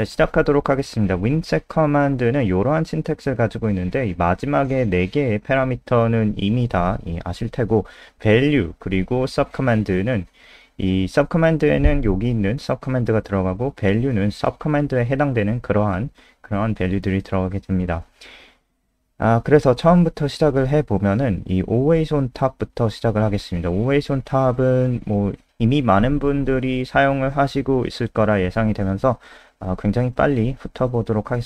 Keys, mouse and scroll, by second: 18.6 Return, 18.9 Return, 20.3 click, 21.1 Return, 21.3 typing, 22.3 click, 22.7-23.4 typing, 24.1 click, 24.6 ctrl+s, 25.6 click, 28.5 ctrl+c, 28.7 click, 29.1 Return, 29.2 Return, 29.4 ctrl+v, 29.5 ctrl+s.